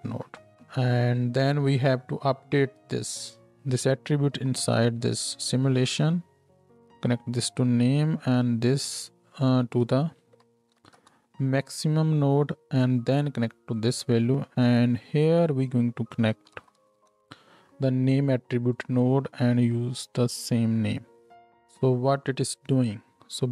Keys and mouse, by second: 4.3 shift+d, 6.5-12.6 middle drag, 12.6 click, 13.1-18.7 middle drag, 18.7-19.8 drag, 19.8-23.5 middle drag.